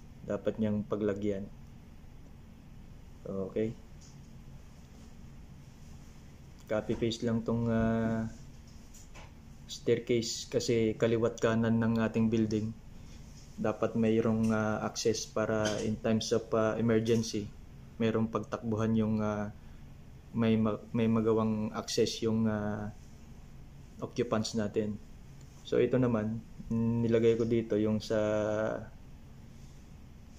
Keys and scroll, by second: 8.4 ctrl+v, 28.2 Up, 28.2 Up, 28.3 Up, 28.4 Up, 28.6 Up, 28.7 Up.